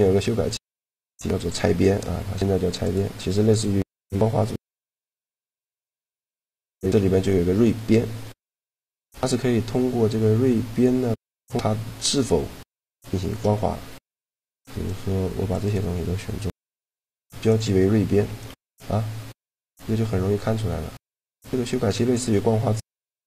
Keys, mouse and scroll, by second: 3.8-7.1 middle drag, 8.2 Tab, 13.4 right click, 13.6 a, 14.0 c, 15.4-16.5 right drag, 16.5 ctrl+e, 17.8 Tab, 18.4 click, 22.7-23.2 middle drag.